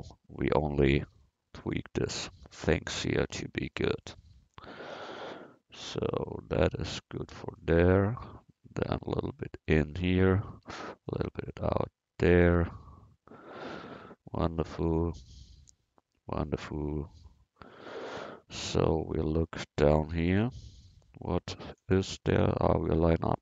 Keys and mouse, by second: 1.2 c, 3.3 a, 3.6 c, 6.8 a, 7.1 c, 10.4 a, 10.7 c, 17.0-18.8 middle drag, 18.8 a, 20.6 c.